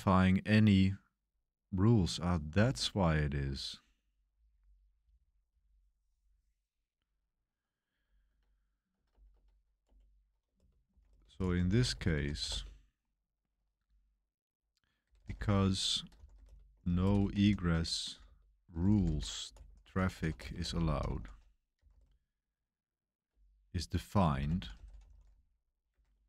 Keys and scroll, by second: 0.9-2.9 typing, 8.0-9.3 typing, 9.8 Return, 10.5-12.9 typing, 14.8-26.2 typing.